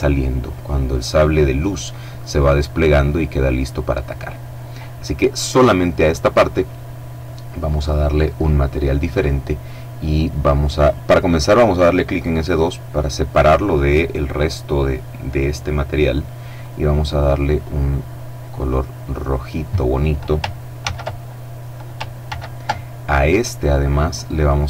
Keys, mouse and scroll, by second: 2.6 click, 3.4-4.0 scroll down 1, 4.0-5.9 middle drag, 6.9-8.3 drag, 11.3 click, 15.6 click, 16.7 click, 19.8 ctrl+c, 21.3 ctrl+v, 23.1 click.